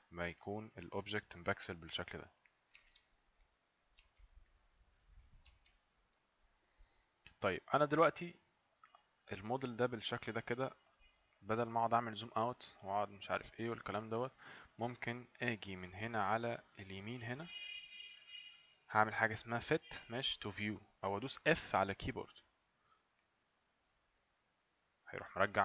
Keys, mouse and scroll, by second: 0.4 click, 2.8 right click, 4.1 right click, 5.6 right click, 23.2 click.